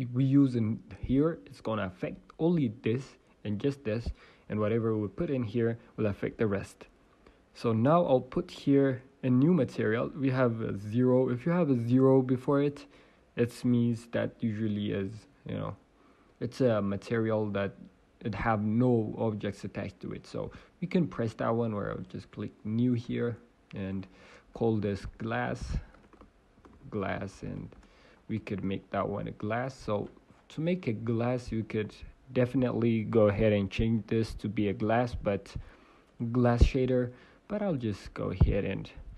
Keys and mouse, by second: 23.0-27.7 drag, 27.7 s, 29.5 click, 30.2-36.1 drag, 30.4 Tab.